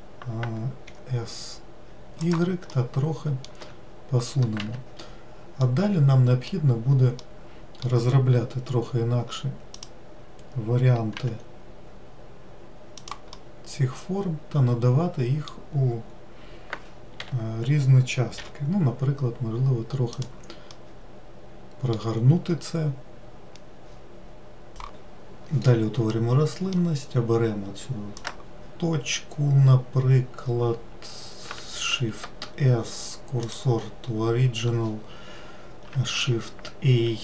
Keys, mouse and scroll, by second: 3.2 middle click, 4.1 w, 5.1 Escape, 6.1-10.3 middle drag, 10.3-11.7 drag, 11.7 g, 13.9-17.0 middle drag, 17.7 l, 18.9 r, 21.3-24.3 middle drag, 26.1-28.1 middle drag, 28.1-31.3 drag, 31.9 shift+s, 36.1 shift+a.